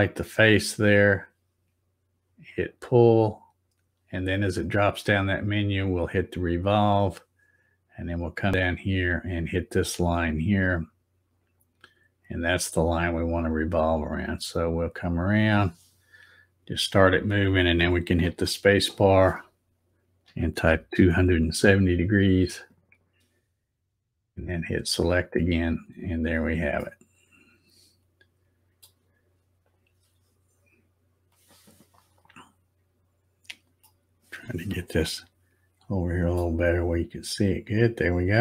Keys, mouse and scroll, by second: 2.6 click, 6.2 click, 11.4 click, 13.6-18.5 drag, 18.3 space, 24.8 click, 25.8-26.3 scroll up 2, 26.8 middle click, 29.7 click, 32.7 scroll down 2, 33.0 scroll up 5, 33.9-35.6 middle drag, 35.9 shift+middle click, 36.7-37.0 scroll up 2, 37.2 scroll down 4, 37.7 scroll up 1.